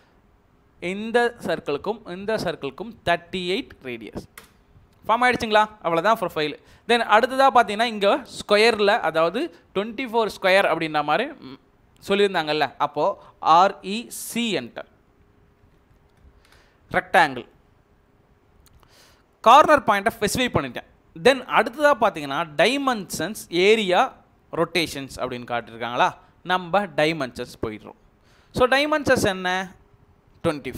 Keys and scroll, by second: 3.5-3.9 typing, 4.3 Return, 13.5-14.3 typing, 15.3-16.4 typing, 30.4 typing.